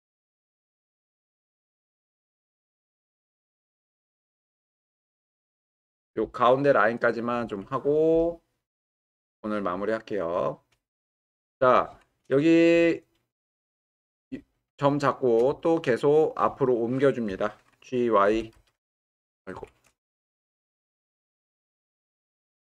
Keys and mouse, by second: 11.5 w, 13.0-13.5 middle drag, 14.8-15.3 shift+middle drag, 15.6-16.4 ctrl+middle drag, 16.6-17.2 shift+middle drag, 18.3 h, 18.5 y, 19.6 Escape, 20.3 ctrl+z, 20.6 ctrl+z, 21.9 g, 22.1 y.